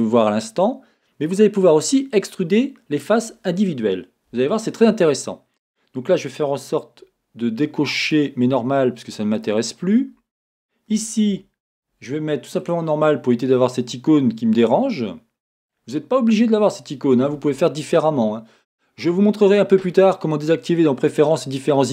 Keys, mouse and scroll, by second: 4.4 Escape, 4.9 Escape, 4.9 scroll down 1, 5.5-6.5 scroll up 1, 8.0-12.7 drag, 10.9 a, 13.7-21.9 middle drag.